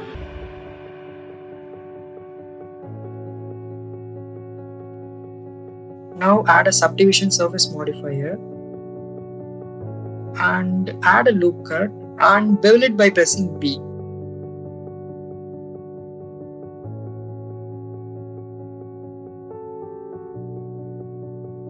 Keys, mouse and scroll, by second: 0.4 z, 3.4 click, 3.6 click, 4.7 shift+middle click, 5.1 middle click, 5.9 click, 7.3-9.6 drag, 10.7 ctrl+r, 11.8 right click, 12.2 ctrl+b, 14.4 click, 15.4 shift+middle click, 15.7 middle click, 17.2 click, 18.3 click, 18.9 Tab, 19.4 click, 21.0 ctrl+r.